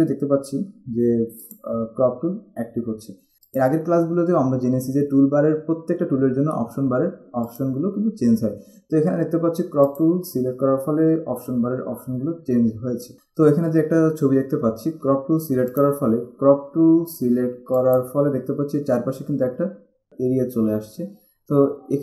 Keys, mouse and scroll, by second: 1.7 click, 2.1 c, 3.7 click, 7.6 click, 10.1 click, 13.1 click, 15.9 click, 17.9 click.